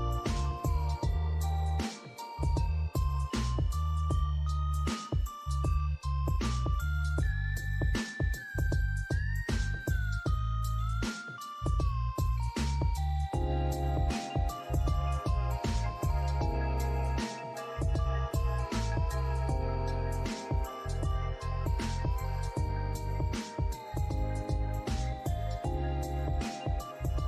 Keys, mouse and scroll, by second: 3.8 alt+middle click, 4.0 alt+scroll up 1, 4.2 scroll down 3, 4.7 alt+click, 9.3 scroll up 1, 9.9 alt+middle click, 12.1 alt+click, 12.6 scroll up 1, 12.9 alt+middle click, 14.1 double click, 14.4-14.9 scroll up 1, 15.2 alt+middle click, 15.5 alt+click, 16.0 right click, 17.6 scroll up 1, 18.1 alt+middle click, 18.3 alt+scroll up 1, 18.4 alt+click, 23.3 alt+click, 25.9 double click, 26.2 scroll down 1, 26.5 alt+click.